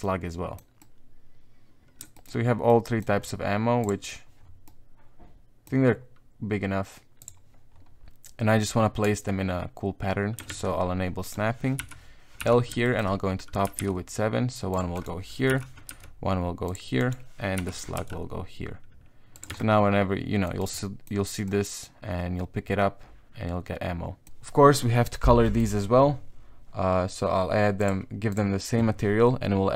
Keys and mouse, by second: 0.0 middle click, 0.8-2.0 middle drag, 2.1 shift+middle click, 2.7 middle click, 3.8 click, 4.6 middle click, 5.6 middle click, 7.2 click, 9.0 Tab, 10.5 shift+Tab, 11.2 right click, 11.8 l, 12.4 KP_7, 12.8 shift+click, 13.6 g, 14.9 right click, 15.5 l, 15.9 g, 17.0 right click, 19.5 Tab, 19.6 middle click, 20.6 right click, 20.8 middle click, 21.4-24.3 middle drag, 25.4 middle click, 27.8 click.